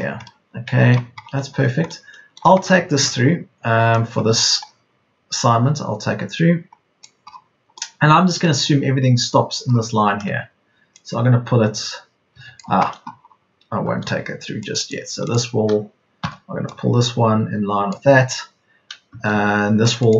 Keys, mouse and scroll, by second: 7.5 Escape, 12.5 Escape, 13.5 Escape, 16.1 p, 19.3 Escape.